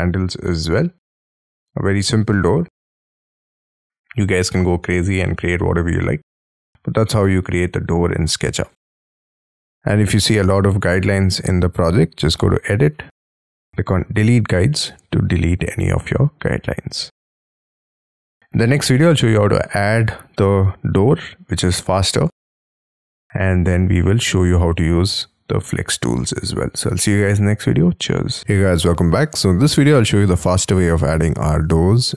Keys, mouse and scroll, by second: 0.4 middle click, 6.0 middle click, 8.5 space, 8.6-9.6 scroll down 7, 8.7 Escape, 8.9 Escape, 9.6 middle click, 9.7-10.2 scroll down 7, 10.4 middle click, 14.7 middle click, 19.1-21.0 scroll down 2, 28.4 middle click.